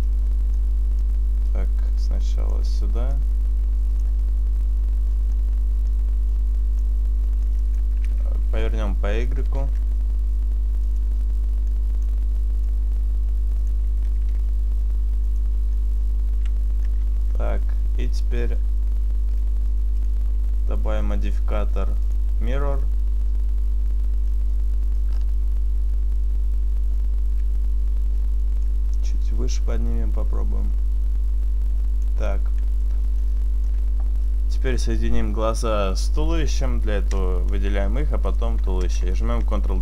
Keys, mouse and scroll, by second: 0.1 middle click, 0.9 click, 3.2 click, 4.2 middle click, 6.0 click, 7.5 click, 9.4 r, 11.0 click, 12.1 click, 12.7 click, 14.2 r, 15.4 click, 15.8 middle click, 17.2 Tab, 18.6-19.4 scroll down 2, 19.4 click, 20.1 click, 24.4 middle click, 25.1-25.9 scroll up 2, 25.9 scroll up 2, 26.0-27.6 scroll down 1, 28.7 click, 32.7-33.3 scroll down 1, 33.3 middle click, 33.3 scroll down 3, 38.4 shift+right click, 39.4 ctrl+j.